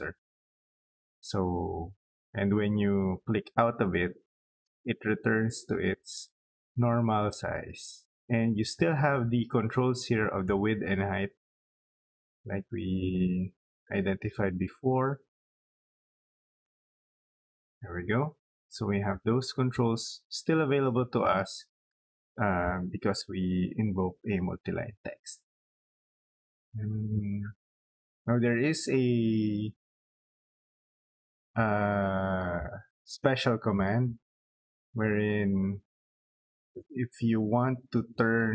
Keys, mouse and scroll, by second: 5.8 click, 6.9 click, 8.2-8.8 scroll down 4, 8.3 middle click, 9.3 scroll up 2, 9.8 middle click, 11.2 click, 13.3 click, 13.8-14.1 scroll up 2, 15.5 click, 16.1 click, 16.5 scroll down 2, 16.7 middle click, 17.3 scroll up 2, 18.0 middle click, 18.9-19.3 scroll down 2, 19.3 middle click, 20.6 middle click, 21.8 middle click, 29.7 middle click, 31.2-32.2 middle drag, 33.3 middle click, 34.4 scroll up 2, 34.8-35.1 scroll down 2, 35.1 scroll up 2, 35.7 middle click.